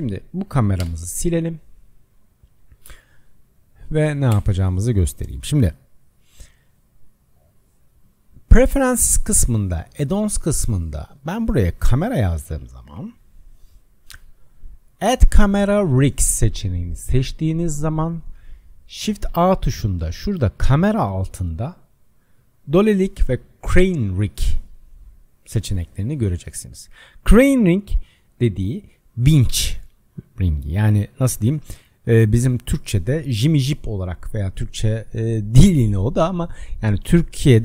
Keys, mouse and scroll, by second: 0.4 click, 0.8 KP_0, 1.6-2.2 scroll down 5, 2.2 scroll down 1, 2.4 click, 2.8 Delete, 3.9 click, 4.3 Delete, 4.8 click, 7.5-10.5 drag, 19.2 shift+a.